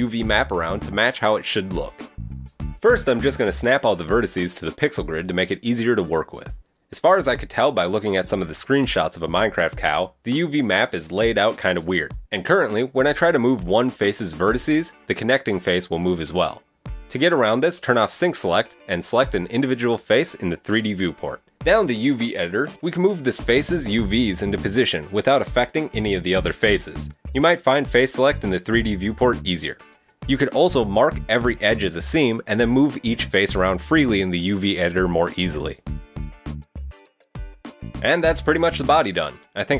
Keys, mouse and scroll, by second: 0.3 right click, 0.5 shift+right click, 0.6 g, 1.3 right click, 1.5 g, 2.0 right click, 2.6 right click, 2.7 g, 3.5 right click, 3.5 g, 4.2 right click, 4.3 g, 4.8 right click, 4.8 g, 5.2 shift+middle click, 5.7 right click, 5.9 g, 6.5 right click, 6.6 g, 7.0 shift+middle click, 7.5 right click, 7.5 g, 8.3 right click, 8.4 g, 8.9 middle click, 9.6 shift+middle click, 9.7 scroll up 1, 11.2 shift+middle click, 11.5 right click, 12.0 shift+right click, 12.3 g, 14.2 click, 14.5 right click, 15.1 click, 15.3 right click, 15.8 click, 16.1 right click, 16.3 shift+right click, 16.4 g, 16.9 middle click, 17.0 Tab, 17.5 Tab, 19.0 click, 19.1 click, 20.5 shift+right click, 20.9 shift+right click, 21.4 right click, 21.8 shift+right click, 22.3 g, 23.0 middle click, 24.6 middle click, 24.9 right click, 25.1 shift+right click, 26.2 right click, 26.3 shift+right click, 26.4 g, 26.7 middle click, 27.1 middle click, 27.2 right click, 27.3 shift+right click, 27.4 shift+right click, 27.4 shift+right click, 27.7 middle click, 27.9 right click, 28.0 shift+right click, 28.0 g, 28.2 middle click, 28.3 right click, 28.5 shift+right click, 28.6 right click, 28.7 shift+right click, 28.7 g, 29.2 middle click, 29.2 scroll down 1, 29.5 middle click, 29.8 right click, 29.9 shift+right click, 30.0 shift+right click, 30.2 right click, 30.3 shift+right click, 30.5 shift+g, 30.7 shift+right click, 30.9 right click, 31.0 shift+right click, 31.1 g, 31.3 middle click, 31.4 shift+middle click, 31.5 middle click, 31.7 scroll up 2, 31.9 middle click, 32.3-32.9 scroll down 2, 32.4 right click, 32.5 shift+right click, 32.6 shift+right click, 32.7 shift+middle click, 33.0 shift+right click, 33.3 g, 33.8 scroll up 3, 33.9 middle click, 34.0 right click, 34.1 shift+right click, 34.2 g, 34.3 right click, 34.4 g, 34.8 middle click, 35.0 middle click, 35.6 right click, 35.7 shift+right click, 35.8 shift+right click, 35.8 middle click, 35.9 shift+right click, 36.3 right click, 36.4 shift+right click, 36.5 shift+right click, 36.7 g, 36.9 right click, 37.1 shift+right click, 37.4-37.7 scroll down 1, 37.4 g, 37.7 middle click, 37.7 scroll up 1, 37.9 Tab, 37.9 middle click, 38.4 Tab.